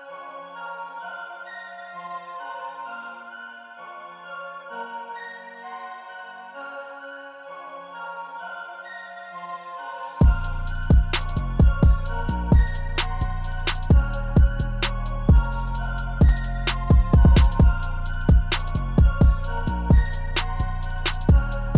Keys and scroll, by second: 10.8 0, 14.3 0.